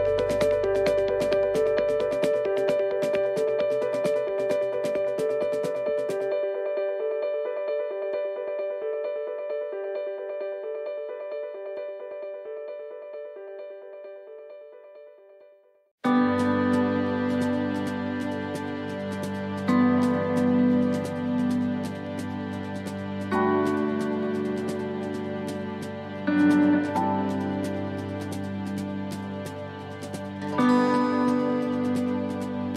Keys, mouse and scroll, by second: 0.2 middle click, 1.6 click, 3.2 middle click, 4.0 shift+middle click, 4.7-5.1 scroll up 3, 5.1 middle click, 7.5 middle click, 8.7 click, 10.4 middle click, 11.8 click, 13.0 middle click, 13.8 shift+middle click, 15.2 click, 17.6 middle click, 18.4 shift+middle click, 19.5 click, 22.2 middle click, 23.0 shift+middle click, 24.4 click, 26.0 click, 28.4 middle click, 29.5 middle click, 30.4-31.0 scroll down 3, 30.9 middle click, 32.2 shift+middle click, 32.3 shift+middle click, 32.6-32.7 scroll up 4.